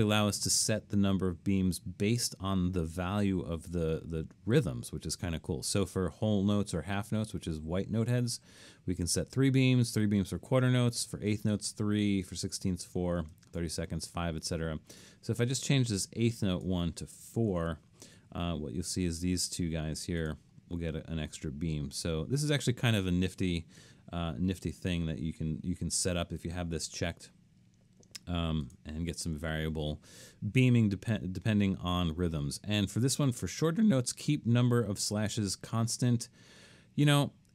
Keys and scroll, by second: 17.6 4, 24.5 3.